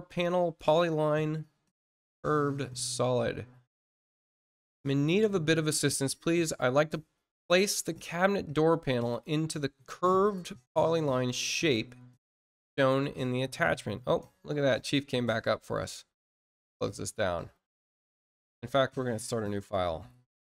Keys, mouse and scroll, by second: 0.2 click, 3.2-3.7 scroll down 2, 4.3-4.6 scroll down 2, 16.5 click.